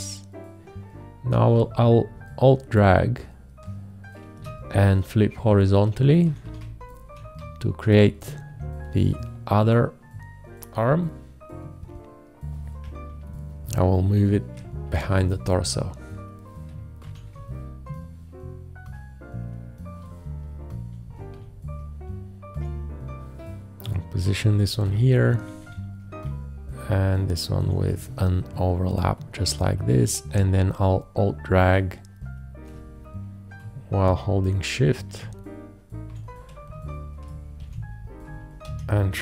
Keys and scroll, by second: 4.3 alt+shift+h, 6.3 Right, 14.9 ctrl+shift+Down, 17.0 ctrl+shift+Down, 20.9 shift+Up, 22.1 Up, 25.1 shift+Up, 26.3 Up, 33.6 Right, 36.1 Left, 37.7 ctrl+v, 38.7 ctrl+q.